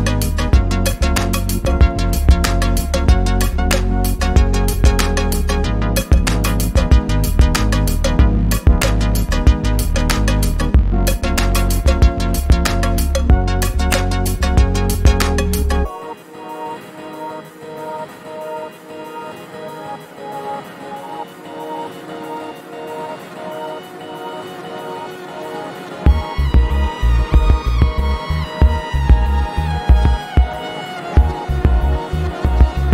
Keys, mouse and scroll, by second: 5.3 ctrl+z, 9.2 ctrl+z, 9.4 ctrl+shift+[, 10.9 click, 12.4 ctrl+e, 12.8 click, 13.3 right click, 14.7 Escape, 15.0 click, 15.9 ctrl+shift+], 17.0 click, 17.1 click, 19.6-20.5 typing, 21.4 click, 22.7 ctrl+z, 23.6 click, 26.6 ctrl+z, 27.0 click.